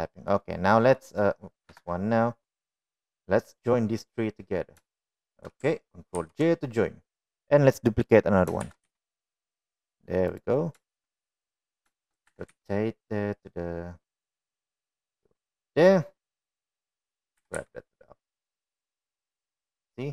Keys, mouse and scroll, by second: 1.3-1.8 middle drag, 2.0 middle click, 2.7 KP_1, 3.8-4.7 drag, 6.1 shift+click, 7.3 ctrl+j, 9.7 shift+d, 13.4 r, 16.9-17.5 middle drag, 17.9-18.3 middle drag, 18.5 g, 19.7-20.1 middle drag.